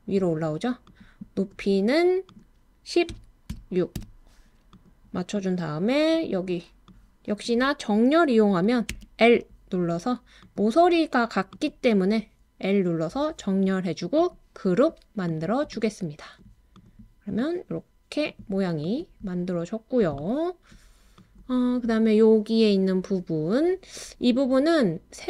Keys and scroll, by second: 2.9-4.0 typing, 8.9 typing.